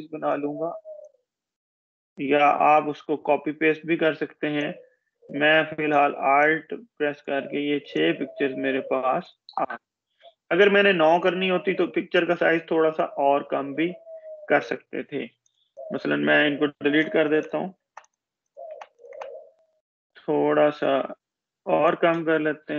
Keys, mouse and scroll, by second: 15.4-17.0 alt+drag, 17.0 Delete, 18.7-22.2 drag.